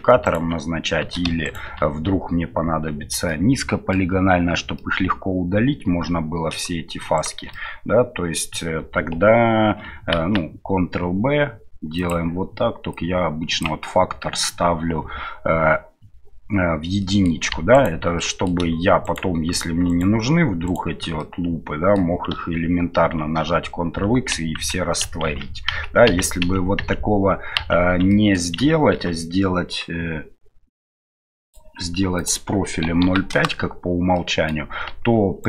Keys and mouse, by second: 0.2 right click, 3.3 middle click, 4.8-6.0 middle drag, 7.1 alt+shift+right click, 7.5-8.5 middle drag, 10.1 ctrl+b, 12.9 click, 17.1 middle click, 17.7 alt+right click, 18.2 middle click, 19.5 alt+shift+right click, 19.9 alt+shift+right click, 20.6 alt+shift+right click, 21.2 middle click, 23.2 ctrl+x, 24.6 ctrl+z, 26.8 ctrl+z, 27.5 ctrl+z, 28.1 middle click, 32.1-33.8 drag, 34.3 middle click.